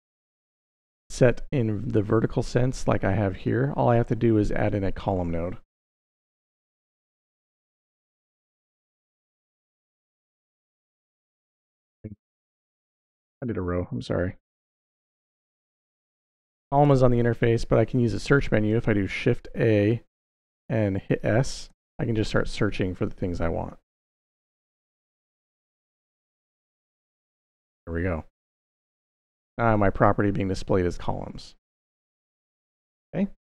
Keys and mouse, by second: 4.3-4.9 drag, 5.7 g, 7.1 drag, 8.0 shift+a, 12.5 middle click, 13.2 click, 14.0 x, 14.5 shift+a, 19.1 shift+s, 19.5 shift+a, 23.7-24.4 drag, 25.1-25.9 drag, 26.7 drag, 27.9 drag, 28.7-29.6 drag.